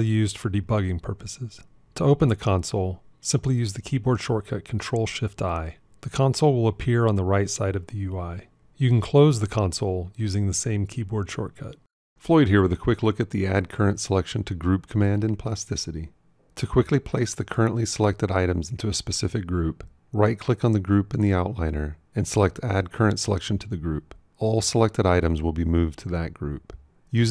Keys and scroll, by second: 3.9 ctrl+shift+i, 10.6 ctrl+shift+i.